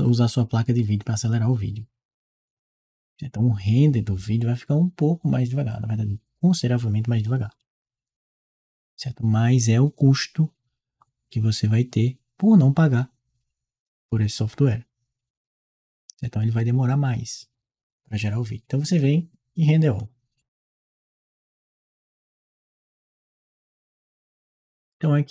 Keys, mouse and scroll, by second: 19.8 click, 25.0 click.